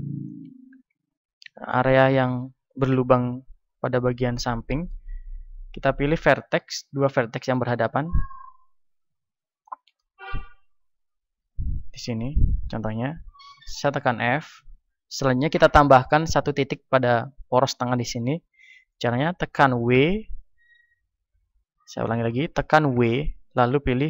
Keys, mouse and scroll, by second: 2.6 a, 4.3-6.5 middle drag, 6.5-9.5 right drag, 9.5-13.9 middle drag, 13.9 f, 19.9 w, 22.9 w.